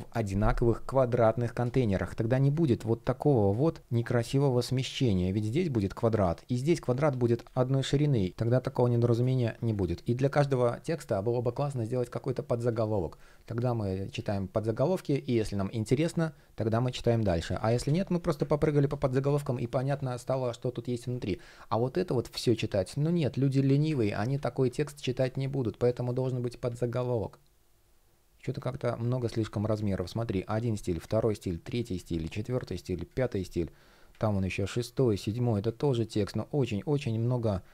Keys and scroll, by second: 1.5 shift+p, 7.4 super+z, 8.8 super+space, 10.6 shift+p, 17.1 super+z, 18.1 super+z, 20.8 shift+p, 23.7 super+z, 29.5 shift+p.